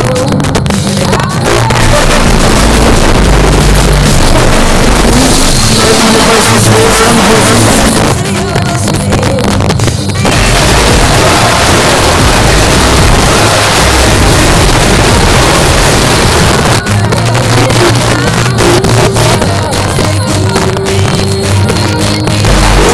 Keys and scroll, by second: 7.9 Page_Down, 16.5 Page_Down.